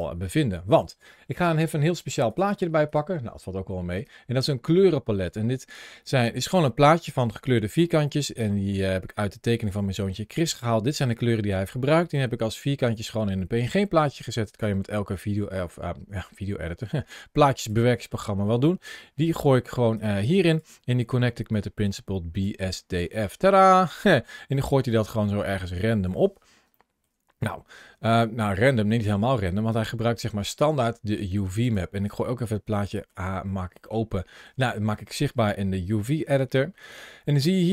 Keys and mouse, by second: 19.9 click, 21.3-22.3 drag, 23.3-25.2 middle drag, 26.6 shift+middle click, 28.0 middle click, 29.5 click, 32.7 shift+middle click, 33.7-34.3 shift+middle drag, 35.3 middle click.